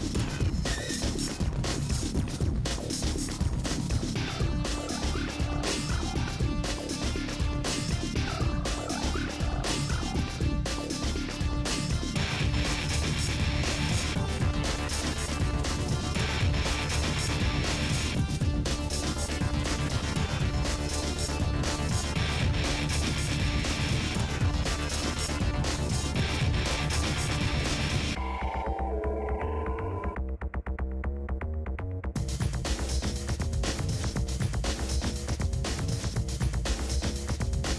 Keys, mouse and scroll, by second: 0.7 e, 1.5 s, 2.0 e, 2.8 s, 4.1 e, 4.7 s, 6.8-8.1 middle drag, 8.1-8.5 scroll down 1, 8.5 click, 8.9 l, 9.5 s, 10.2 KP_1, 10.3 scroll up 6, 10.5 shift+middle click, 10.9 g, 11.9-13.1 drag, 13.2 middle click, 13.5 s, 13.8 middle click, 14.1 click, 14.3 middle click, 14.6 s, 15.2 middle click, 15.6 click, 16.0 s, 16.5 s, 16.9 click, 17.1 s, 17.6 middle click, 17.9 click, 18.4-21.8 middle drag, 21.8-22.2 scroll down 7, 22.2 click, 22.5-30.1 typing, 24.0 click, 26.7 scroll up 7, 26.8 shift+middle click, 27.0 shift+middle click, 28.6-29.2 scroll down 10, 29.7 scroll up 12, 29.9 shift+middle click, 31.0 scroll down 1, 31.1 middle click, 31.6-31.9 scroll down 9, 31.9 middle click, 32.5 click, 32.6 middle click, 33.5 scroll up 4, 33.9 click, 34.3 l, 34.9 KP_7, 35.3 click, 35.6 shift+middle click, 35.7-36.2 scroll down 1, 36.5 shift+d.